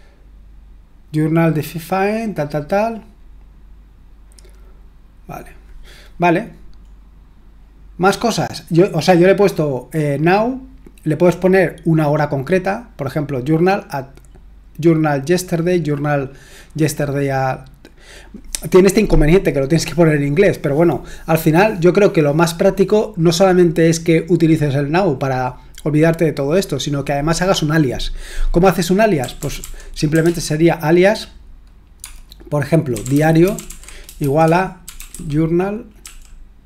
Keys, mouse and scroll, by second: 6.8-16.2 scroll down 1, 16.2-29.2 scroll down 1, 29.0-30.7 typing, 32.0-36.6 typing.